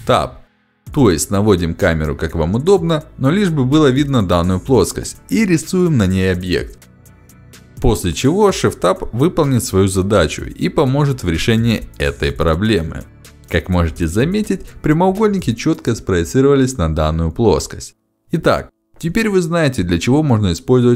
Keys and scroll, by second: 1.3 ctrl+z, 4.9 ctrl+shift+x, 10.9 f, 11.8 d, 13.5 space.